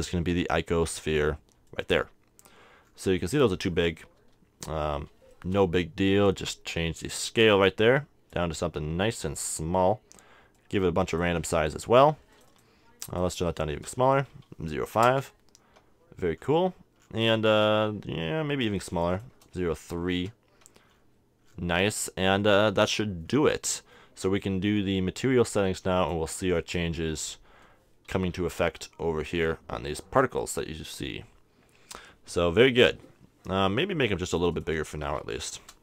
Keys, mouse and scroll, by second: 9.2-14.8 drag, 16.4-19.0 middle drag, 19.0-20.7 drag, 20.9-26.1 middle drag, 26.8-27.9 drag, 28.2 t, 28.6-31.4 middle drag, 34.2-35.8 drag.